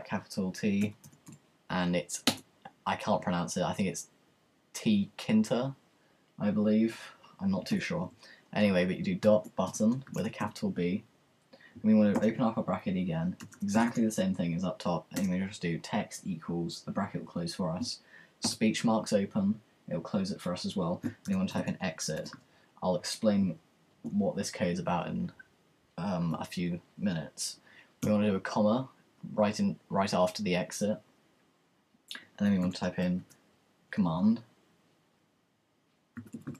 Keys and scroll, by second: 0.6-1.8 typing, 7.8 typing, 9.0-14.3 typing, 15.4 typing, 18.4-19.3 typing, 21.3-23.9 typing, 29.3 ,, 32.6-34.3 typing, 35.6-36.5 typing.